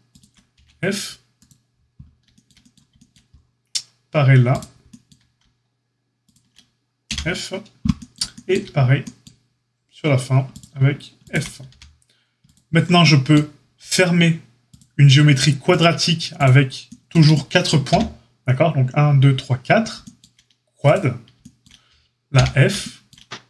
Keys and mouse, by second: 0.0 shift+click, 0.1-23.4 shift+middle drag, 0.5 f, 0.5 g, 4.4 click, 7.0 f, 10.4 click, 11.1 shift+click, 11.6 f, 14.7-15.7 shift+drag, 17.8 f, 22.3 f.